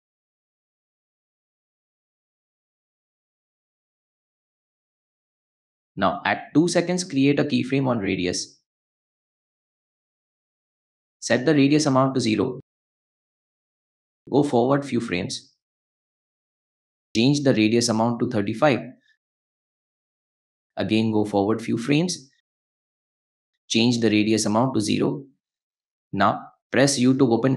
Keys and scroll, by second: 5.3 u, 13.3 0, 13.5 Return, 16.0-16.4 shift+scroll, 19.1 3, 19.3 5, 19.6 Return, 21.6 shift+Return, 22.1 shift+Page_Down, 24.9 0, 25.1 Return, 26.5 u.